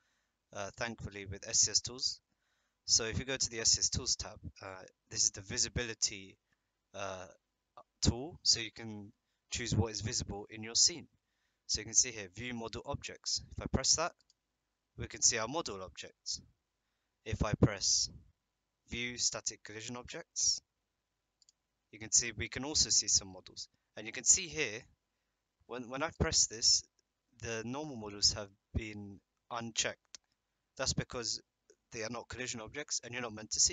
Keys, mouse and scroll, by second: 0.7 click, 14.2 click, 21.4 click, 26.1 click.